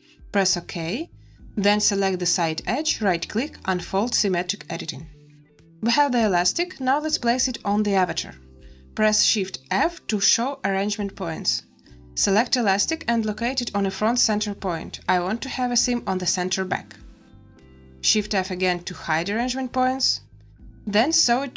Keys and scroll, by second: 1.2 z, 9.6 shift+f, 18.4 shift+f.